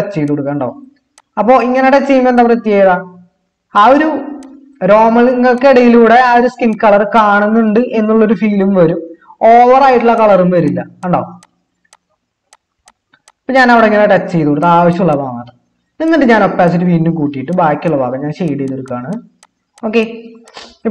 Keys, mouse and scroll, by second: 0.4 typing.